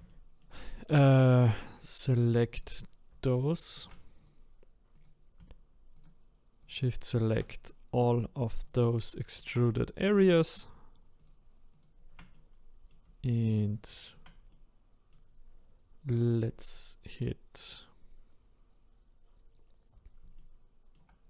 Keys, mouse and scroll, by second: 0.1 shift+middle click, 0.4-0.9 shift+scroll down 1, 0.9 middle click, 1.8 click, 5.0 click, 6.0 shift+click, 6.7 shift+click, 7.6-8.6 middle drag, 8.6 shift+click, 9.4 shift+click, 9.7 middle click, 10.6 shift+click, 11.3 shift+click, 12.3-13.7 middle drag, 13.7 shift+click, 14.1 shift+click, 14.5-17.7 middle drag, 17.7 click, 20.4-21.2 shift+middle drag.